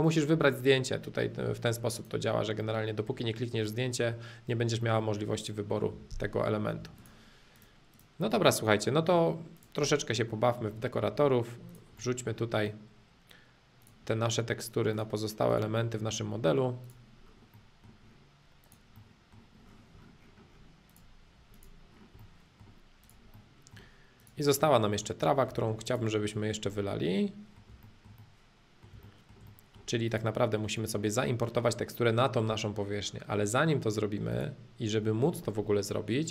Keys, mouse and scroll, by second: 0.0-2.0 drag, 2.6-4.6 middle drag, 4.8-5.9 middle drag, 5.9 b, 7.0-8.4 drag, 8.4-9.5 middle drag, 9.5 click, 9.9-11.7 middle drag, 11.7 click, 12.0-13.8 middle drag, 13.8 click, 14.0 middle click, 14.9 click, 15.8-16.8 middle drag, 16.8 click, 17.3 middle click, 18.0 middle click, 18.6 click, 18.9 middle click, 19.7-20.9 middle drag, 20.9-22.2 drag, 22.2 middle click, 23.0 click, 23.3 middle click, 24.2 click, 24.6 middle click, 25.5 space, 25.8 click, 26.3-26.8 scroll down 2, 26.8 middle click, 27.9-28.9 shift+middle drag, 29.1-30.1 shift+middle drag, 30.1 click, 30.5-32.8 middle drag, 34.3-36.3 drag.